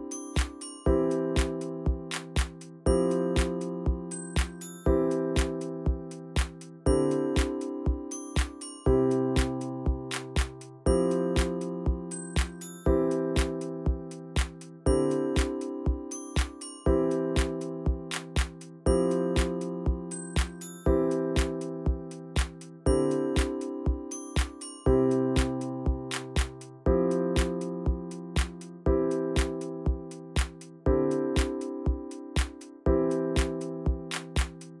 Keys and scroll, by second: 4.5 ctrl+z, 5.2-5.8 Right, 5.9-6.8 Left, 6.9 Left, 6.9 Tab, 7.0 Left, 7.2 Left, 7.3 Left, 7.4 Left, 7.5 Left, 7.6 Left, 7.8 Left, 11.4-11.8 shift+Left, 13.6 shift+Up, 15.2 ctrl+shift+g, 17.9 ctrl+shift+z, 18.1 ctrl+shift+z, 21.9 typing, 22.0 Return, 23.1 typing, 23.3 Return, 24.6 ctrl+z, 24.7 ctrl+z, 25.7 ctrl+z, 25.9 ctrl+z, 27.8 typing, 27.9 Return, 32.1-34.8 typing.